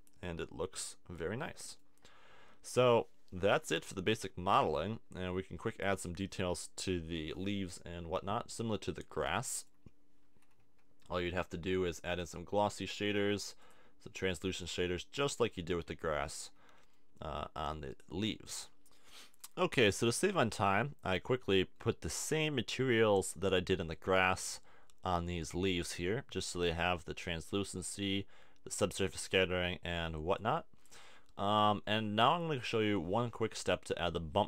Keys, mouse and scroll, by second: 10.6 t, 15.7 n, 22.9-24.6 middle drag, 26.5-30.4 middle drag, 30.4-32.1 right drag.